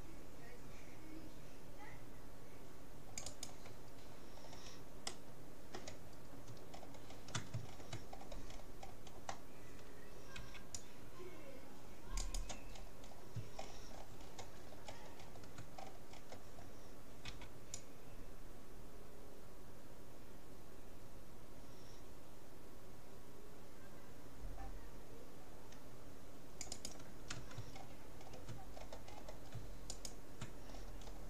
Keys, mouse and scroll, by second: 4.1-10.1 middle drag, 10.5 c, 10.7 middle click, 12.7 middle click, 13.7-17.9 middle drag, 17.3 c, 26.9-28.7 right drag, 27.7-29.5 middle drag, 29.9-31.2 right drag, 30.7 middle click.